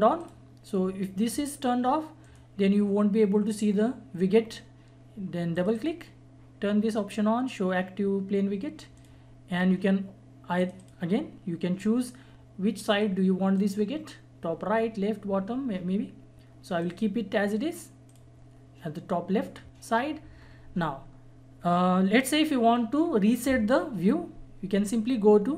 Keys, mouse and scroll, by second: 5.5 click, 15.8 click, 16.8 click.